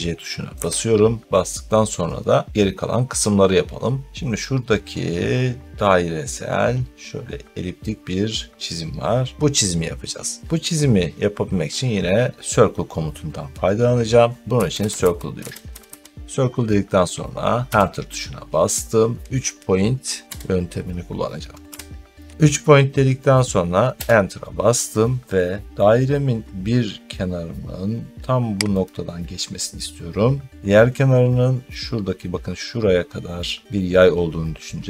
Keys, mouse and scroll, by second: 0.4 Escape, 3.4 scroll up 1, 3.4 scroll, 14.2-16.3 typing, 17.7 Return, 20.2 3, 21.6 p, 23.9 Return, 28.7 click.